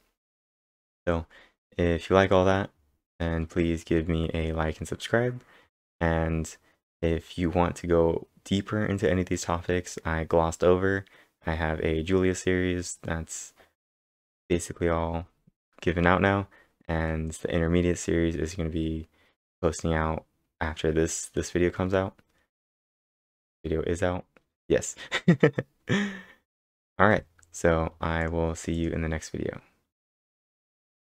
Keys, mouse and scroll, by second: 0.0 scroll up 6, 0.4 scroll down 2, 3.1 scroll down 1, 4.1 scroll up 4, 4.8 scroll up 3, 5.7 scroll up 2, 7.2 scroll down 3, 9.8 scroll down 4, 21.9 scroll down 6, 22.5 scroll down 4, 24.4 scroll down 9, 26.3-26.9 scroll down 7, 27.2 scroll up 4, 28.2 click, 28.7 click, 30.4-31.0 typing.